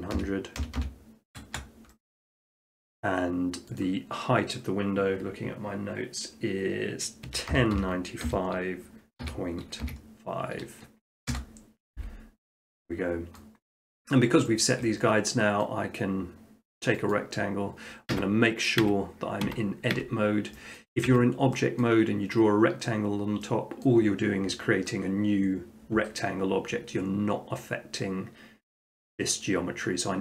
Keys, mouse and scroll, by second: 0.1-0.6 typing, 1.4 Return, 2.6-3.7 middle drag, 3.8-5.0 drag, 7.3-9.9 typing, 11.3 Return, 13.4 middle click, 13.7 middle click, 13.9 middle click, 14.7 shift+middle click, 15.7 middle click, 17.2 click, 17.4 middle click, 17.6 middle click, 18.2 Tab, 18.4 scroll, 18.8 Tab, 19.4 Tab, 20.1 Tab, 20.8 scroll, 21.1 Tab, 21.9 middle click, 23.8 middle click.